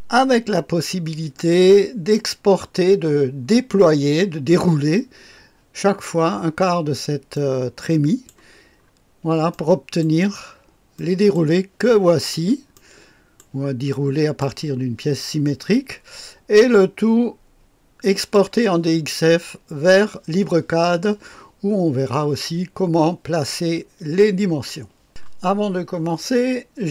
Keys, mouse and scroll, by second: 0.4 scroll up 1, 0.7-1.4 scroll down 1, 1.4-2.5 right drag, 7.3-8.7 right drag, 8.8-9.5 scroll down 2, 9.5 right click, 10.9 scroll down 2, 11.0 right click, 12.7 right click, 13.9-15.0 drag, 13.9 right click, 18.2 click, 25.1 click.